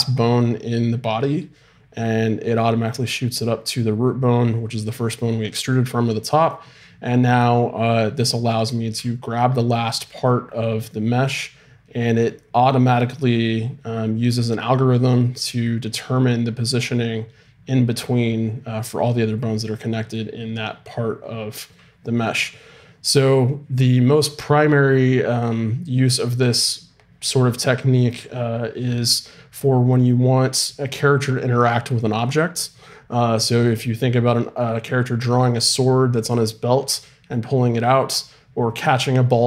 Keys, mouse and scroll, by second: 8.9 g.